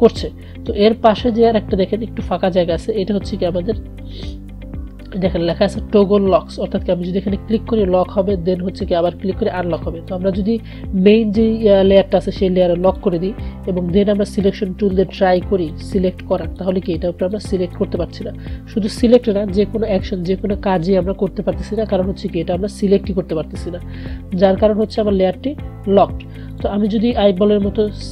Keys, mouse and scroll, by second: 13.0 click, 25.0 click.